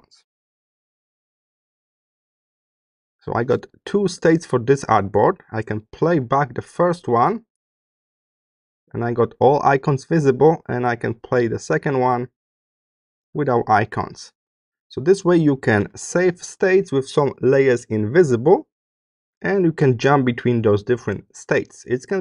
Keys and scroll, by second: 1.0 s.